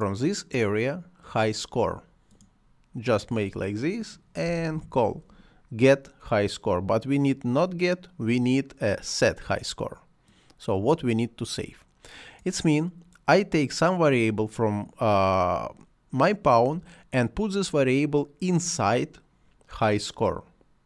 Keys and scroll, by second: 4.4 h, 4.7 i.